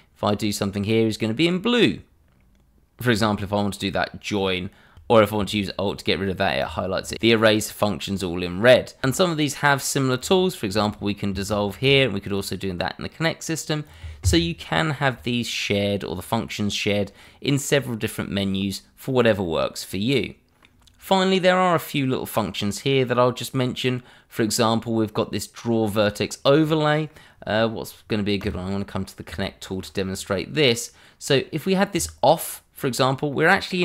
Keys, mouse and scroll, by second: 3.1 click, 6.6 alt+click, 7.1 click, 10.2 click, 11.5 ctrl+z, 12.2 click, 15.2-15.7 scroll down 1, 19.9 middle click, 26.6 middle click, 28.4 click, 28.9 scroll up 1, 29.4 shift+middle click, 31.9 click, 32.7 scroll down 1, 33.3 middle click.